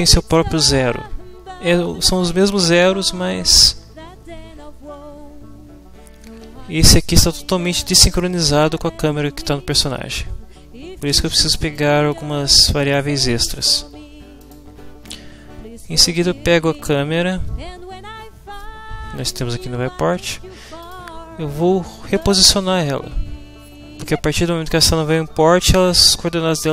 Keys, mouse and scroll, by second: 11.7-13.1 middle drag, 11.7-13.1 scroll up 2, 14.4 click, 15.7-17.1 drag, 20.8 click, 21.1-22.1 middle drag, 22.1 click.